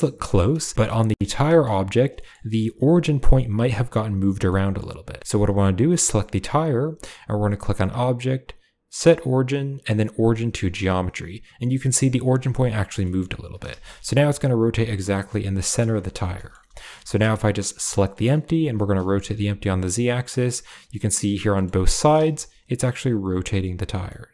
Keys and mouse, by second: 0.5 shift+middle click, 1.3 shift+middle drag, 2.0 click, 2.1 middle click, 4.3 middle click, 5.2 Tab, 5.7 g, 7.7-10.4 drag, 12.9 middle drag, 13.2 r, 15.9 shift+middle drag, 16.2 shift+middle drag, 16.8 shift+middle drag, 17.0 middle drag, 17.7 right click, 17.9 middle click, 18.6 r, 20.5-21.5 middle drag, 21.7 r, 23.9 middle drag, 24.2-24.3 drag.